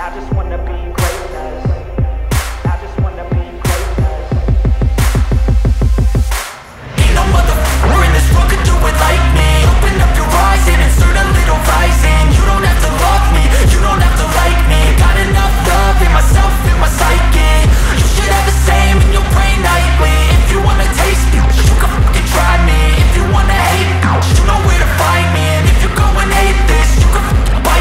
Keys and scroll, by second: 12.4 space, 16.3 ctrl+z, 16.7 space, 19.6 space, 21.6 space, 26.8 Delete.